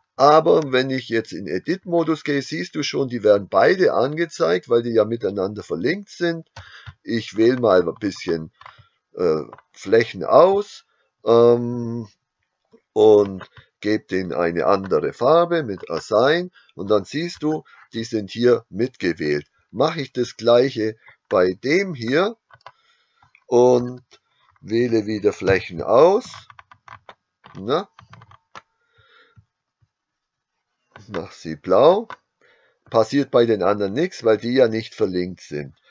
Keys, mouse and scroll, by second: 0.0 Tab, 6.7 b, 13.3 click, 14.7 click, 15.9 click, 17.4 Tab, 21.1-22.3 right drag, 22.6 click, 23.9 Tab, 25.5 b, 31.0 click, 31.9 click.